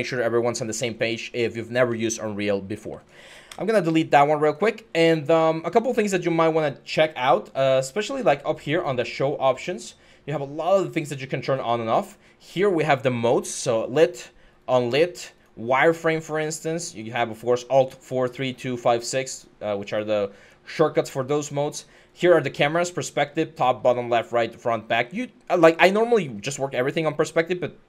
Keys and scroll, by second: 0.8-2.6 typing, 3.2 Delete, 20.4-21.2 typing.